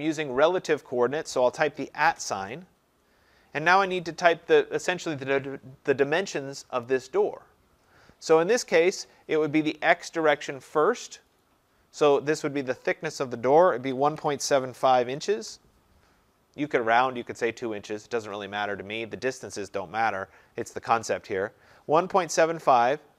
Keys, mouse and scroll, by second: 1.7 click, 2.0 @, 13.7-15.4 typing.